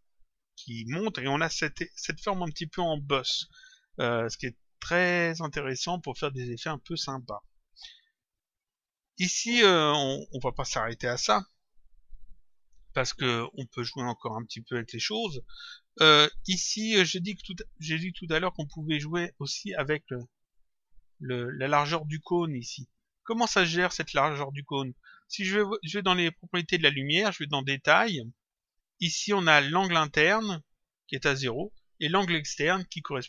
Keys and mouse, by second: 4.9 click, 8.7 click, 9.9 click, 14.4 click, 17.6 click, 19.2 click, 20.5 click, 24.7 click, 26.7 click, 27.8 click, 32.8 click.